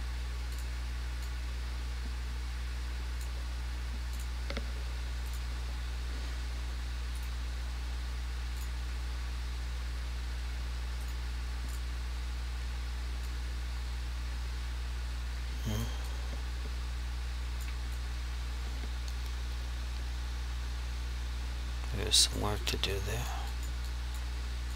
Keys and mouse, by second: 0.6 click, 1.4 click, 4.2 click, 7.3 right click, 8.7 click, 11.1 right click, 11.8 click, 13.4 click, 16.2 click, 18.1 click, 22.7 alt+click, 23.1 click, 23.7 alt+click, 24.0 click.